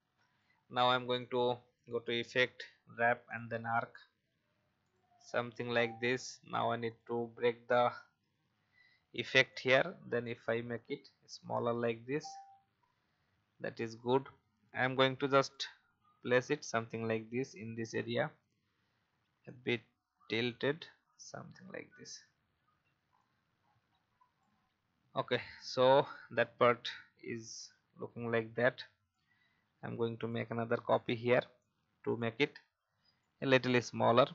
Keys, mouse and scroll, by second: 1.2 click, 7.4-7.7 alt+scroll down 1, 9.5 shift+click, 10.7-15.8 alt+shift+drag, 16.1 alt+scroll up 1, 17.4 shift+click, 19.4-22.2 drag, 23.1-24.4 shift+drag, 25.1 alt+scroll down 1, 26.1 alt+scroll up 1, 27.4 alt+scroll down 1, 28.2-28.5 alt+scroll up 1, 29.2-30.3 alt+drag, 31.5 alt+shift+click, 33.2-34.3 alt+shift+drag.